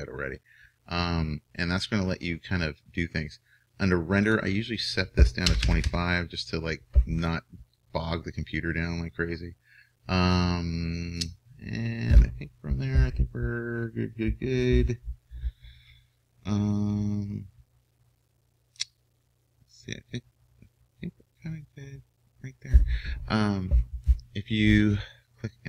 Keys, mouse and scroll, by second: 0.3-25.6 middle drag.